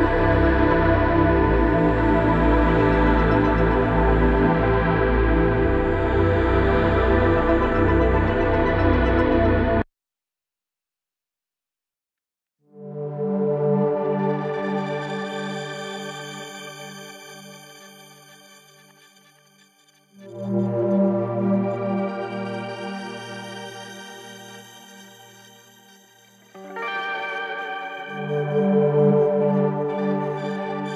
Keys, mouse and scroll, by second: 1.9-3.6 shift+drag, 3.6 shift+space, 7.1 shift+space, 8.5 ctrl+space, 8.7 ctrl+click, 9.0 ctrl+space, 9.6-11.4 drag, 12.0 click, 19.5 click, 23.7 click, 27.7 click.